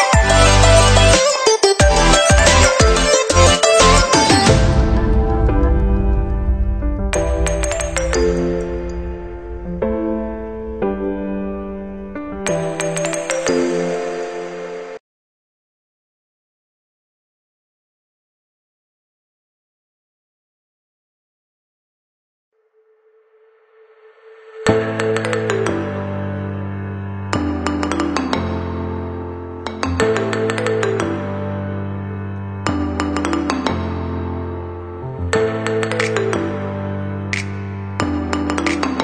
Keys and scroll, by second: 1.5 Delete, 33.0 ctrl+0.